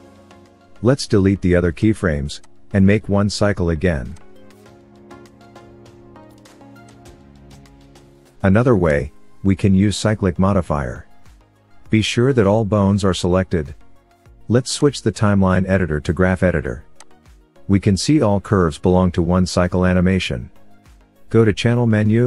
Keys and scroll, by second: 6.1 Delete, 11.7 a.